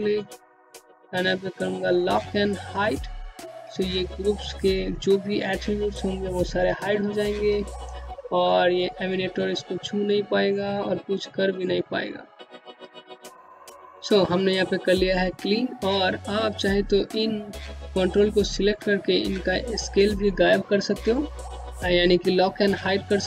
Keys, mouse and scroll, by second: 0.6 click, 5.1 click, 14.2 click.